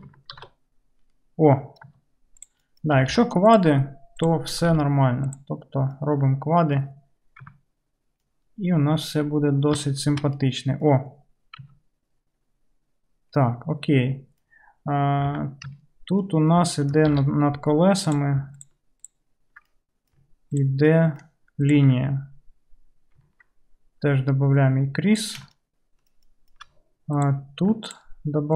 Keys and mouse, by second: 0.4 ctrl+x, 2.4 click, 2.6-18.1 middle drag, 3.0 g, 4.5 g, 7.5 Tab, 11.7 Tab, 15.4 2, 17.2 alt+z, 18.1 click, 18.2 ctrl+middle click, 18.7 ctrl+click, 19.1-20.6 ctrl+middle drag, 20.6 ctrl+click, 20.7 ctrl+middle click, 21.7 ctrl+click, 21.8-24.6 ctrl+middle drag, 24.6-27.3 drag, 27.3-28.5 middle drag.